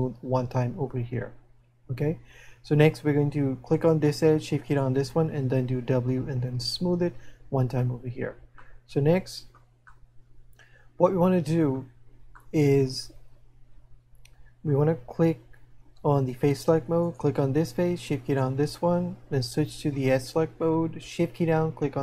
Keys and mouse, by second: 8.9 middle click, 10.4 middle click, 12.4 middle click, 17.1 right click, 18.3 right click.